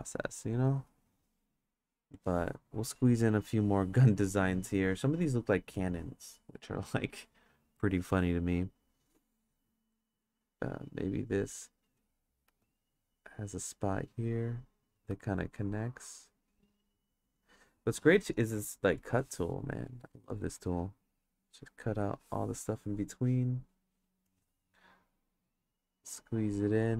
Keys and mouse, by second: 2.2 click, 3.0 click, 5.8 click, 10.3-12.0 drag, 12.5 ctrl+z, 13.2-15.0 drag, 15.1 ctrl+z, 15.4-17.4 drag, 18.5 click, 20.0 click, 20.6 click, 21.4 click, 25.2 click.